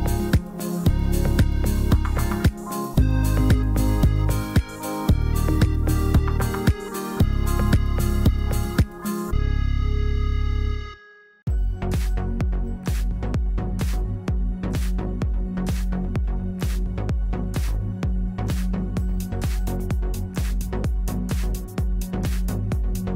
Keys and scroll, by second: 6.5 e, 8.7 ctrl+z, 16.2 F3, 17.1 F2, 19.5 x.